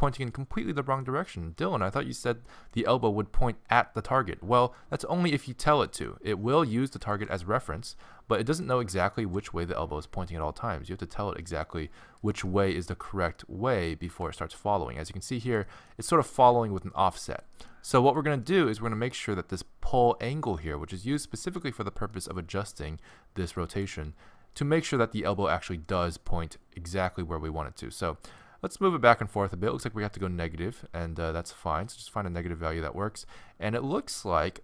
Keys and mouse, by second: 0.0 middle click, 1.4-6.9 middle drag, 6.9-8.8 drag, 7.1 g, 9.2 g, 14.1 g, 16.0 g, 18.1-21.3 middle drag, 23.0-27.8 middle drag, 33.7 middle click.